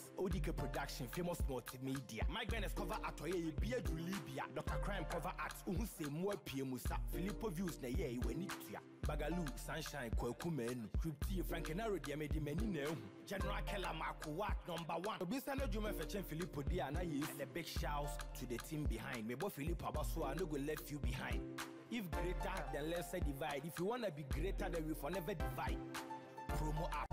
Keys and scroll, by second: 11.2 ctrl+t, 15.3 Return, 16.1 ctrl+=, 21.9 ctrl+i, 24.6 Down, 27.0 ctrl+].